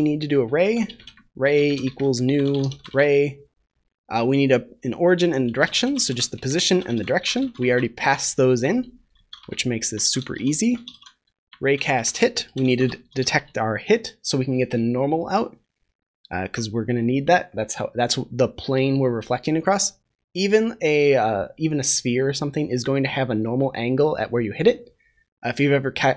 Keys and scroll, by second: 9.2 ctrl+s, 13.0 ctrl+s.